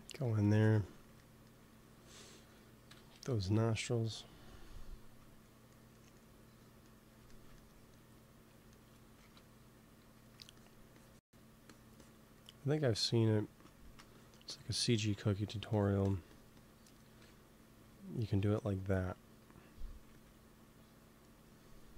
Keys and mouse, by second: 0.1 f, 2.8 KP_2, 2.8 KP_1, 3.1 KP_1, 9.1 shift+c, 9.9 f, 10.5-13.7 drag, 13.0 f, 14.0-18.1 drag, 17.1 KP_1, 18.1 middle click, 20.0 ctrl+s.